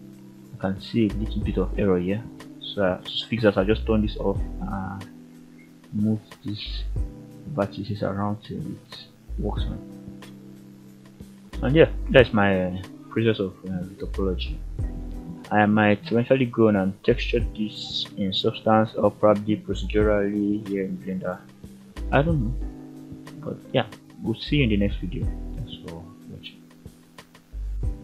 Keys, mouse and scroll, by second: 0.0-0.5 scroll up 1, 0.6 click, 1.1 shift+middle drag, 1.5-1.8 scroll up 4, 2.4 shift+middle click, 3.0 Tab, 4.5 click, 5.4 click, 6.3 g, 7.5 click, 8.8 click, 9.0 g, 9.8 click, 10.5 click, 10.8 g, 11.9 click, 12.1-12.8 scroll down 4, 12.4 Tab, 13.0 alt+a, 13.2-14.9 middle drag, 15.3-16.0 shift+middle drag, 16.3-16.7 middle drag, 17.3-18.4 scroll up 5, 18.5-19.0 scroll down 2, 19.0-19.6 middle drag, 20.3-20.6 shift+middle drag, 21.0-22.3 middle drag.